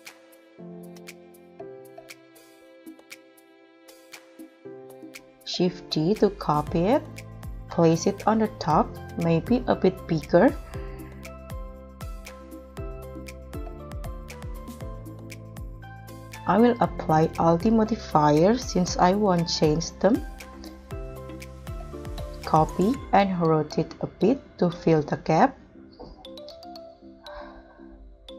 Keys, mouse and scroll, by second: 0.0-1.2 typing, 0.1 Return, 0.7 Return, 1.1 Return, 1.5 double click, 1.6 double click, 1.6 double click, 2.4 double click, 2.6 double click, 2.8 scroll up 1, 2.9 middle click, 3.1 scroll down 6, 3.2 scroll up 2, 3.4 middle click, 5.4 shift+d, 10.2 shift+d, 12.9 KP_1, 13.8 scroll down 3, 14.1 scroll up 2, 21.2 shift+d, 22.3 z, 28.2 shift+d.